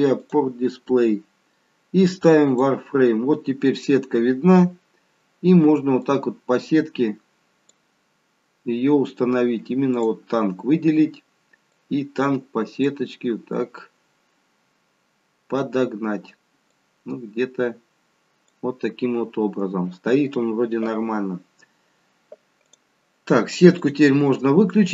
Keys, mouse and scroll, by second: 0.1 click, 0.1-0.7 scroll down 3, 0.7-1.4 scroll down 1, 1.4-2.5 scroll down 1, 2.5 click, 3.9-4.5 scroll up 4, 4.5-5.0 scroll down 1, 5.9 click, 9.9 click, 11.7 click, 16.8 click, 22.6 click, 23.7 click.